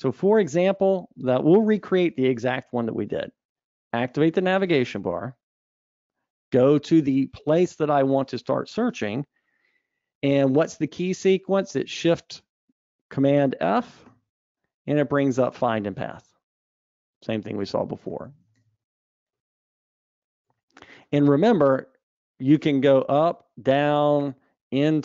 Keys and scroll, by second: 4.3 super+Up, 14.7 ctrl+shift+super+f, 22.0 super+Up.